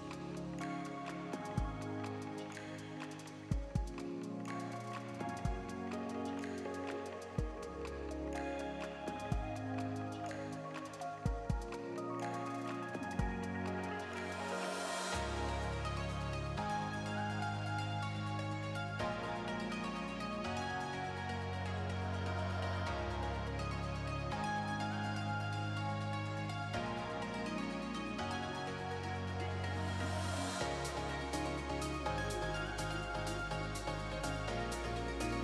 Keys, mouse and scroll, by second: 1.3 alt+a, 1.5 shift+middle click, 2.2 alt+z, 2.5 middle click, 3.2 KP_3, 3.7 scroll up 3, 4.0 shift+middle click, 4.4 scroll up 1, 6.3 click, 6.8 shift+click, 7.5 click, 11.7 click, 19.0 1, 19.5 alt+a, 19.7 scroll up 1, 20.0 shift+middle click, 22.6 alt+click, 25.6 alt+click, 30.0 click, 31.7 r, 33.5 alt+click, 35.2 click.